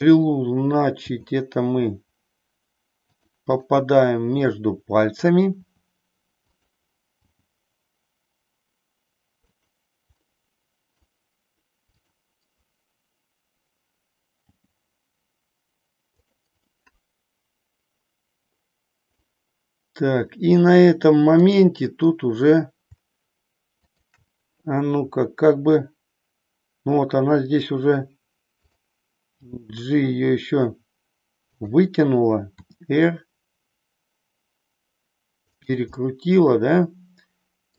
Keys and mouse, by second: 0.9 g, 3.6-5.3 middle drag, 5.6 r, 6.5 click, 7.3 g, 10.3 middle click, 14.4 g, 16.8-19.2 middle drag, 21.3 click, 23.8-24.9 shift+drag, 25.2 r, 28.8 click, 29.5 g, 31.6 click, 32.5 r, 35.9-37.7 middle drag.